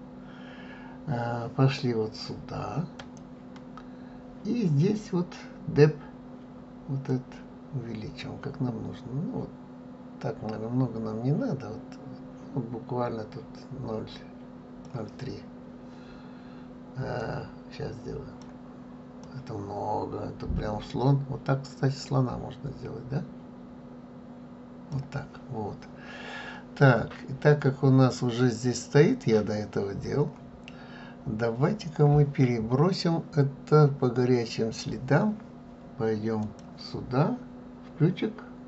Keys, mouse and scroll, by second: 3.0 click, 7.1-10.1 drag, 17.2-22.2 drag, 36.4 click.